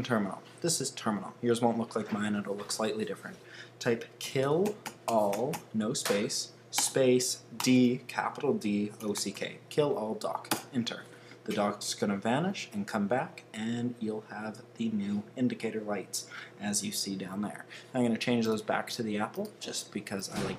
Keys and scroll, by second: 4.0-11.5 typing, 10.5 Return.